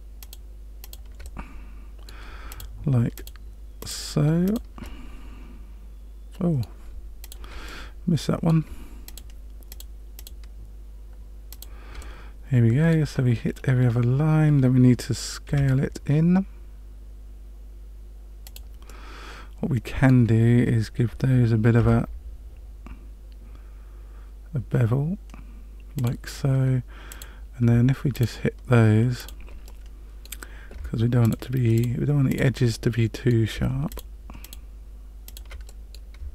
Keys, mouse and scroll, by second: 0.2 shift+click, 0.8 shift+click, 1.2 middle click, 2.5 shift+click, 3.1 shift+click, 3.8 shift+click, 4.4 shift+click, 4.8 middle click, 7.2 shift+click, 7.6 middle click, 9.0 shift+click, 9.7 shift+click, 10.1 shift+click, 11.5 shift+click, 12.0 middle click, 13.5-14.5 scroll up 3, 15.4 s, 18.8 middle click, 21.7 ctrl+b, 27.0 click, 28.1 shift+click, 29.1 shift+click, 29.6 middle click, 31.2 shift+click, 31.7 shift+click, 32.2 shift+click, 32.7 middle click, 33.9 shift+click, 34.4 shift+click, 35.2 shift+click, 35.6 middle click.